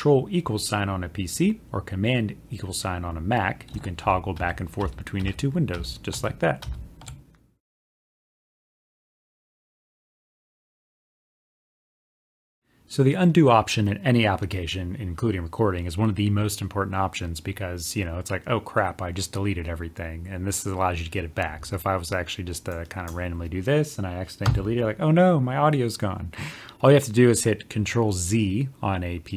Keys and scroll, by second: 12.6 ctrl+z.